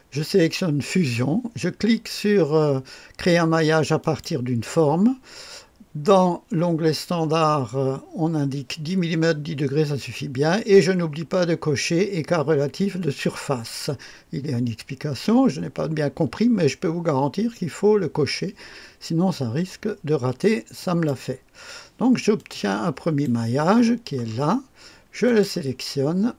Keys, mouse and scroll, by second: 4.0 click, 20.7 click, 22.3 click, 24.3 scroll down 1, 25.2 click.